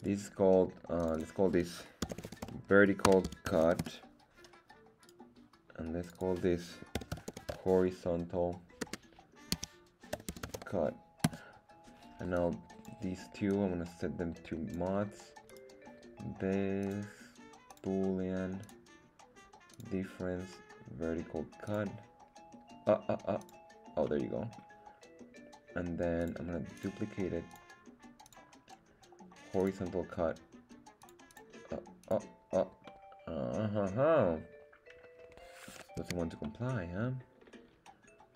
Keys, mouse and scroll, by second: 0.1 right click, 1.0 click, 1.1-4.4 drag, 5.0 right click, 6.0 click, 6.1-11.9 drag, 12.3-13.0 drag, 13.5-14.7 drag, 15.4 right click, 16.8-17.8 drag, 18.6 click, 19.7-21.8 drag, 23.4 click, 24.0-24.7 middle drag, 26.2-26.9 drag, 27.5 click, 28.2-29.7 drag, 31.0 click, 31.3 click, 32.0 click, 32.9-36.0 middle drag, 36.1 z, 36.4-38.3 middle drag.